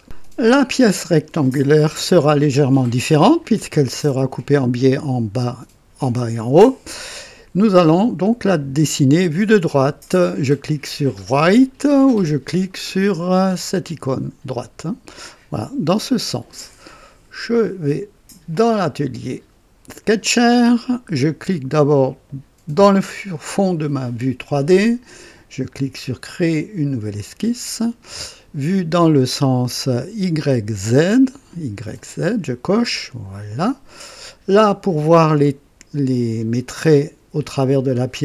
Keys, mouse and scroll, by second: 3.4 click, 7.0-8.4 drag, 11.5 click, 14.0 click, 18.4 click, 19.9 click, 22.7 click, 27.1 click, 31.9 click, 33.0 click, 34.0 scroll up 2, 35.1 scroll down 2, 35.4 right click.